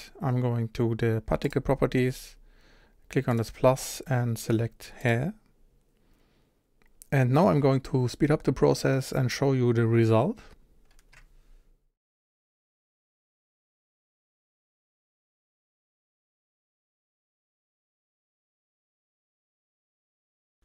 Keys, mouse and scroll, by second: 1.4 click, 3.3-5.1 drag, 12.9-14.5 drag, 14.7 middle click, 15.0 click, 15.5 middle click, 15.8 click, 15.9 middle drag, 16.1-16.4 drag, 16.4 middle click, 16.9 click, 17.0 shift+middle click, 17.1 click, 17.3 f, 17.5 scroll down 1, 17.5 middle click, 17.6 click, 17.8 scroll up 1, 17.9 f, 18.1 click, 18.4 scroll down 1, 18.4 f, 18.6 click.